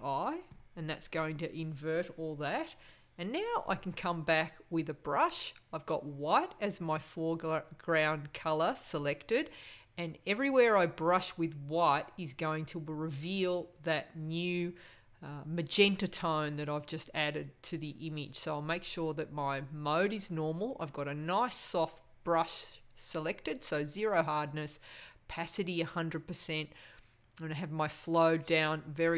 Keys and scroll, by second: 0.4 super+i.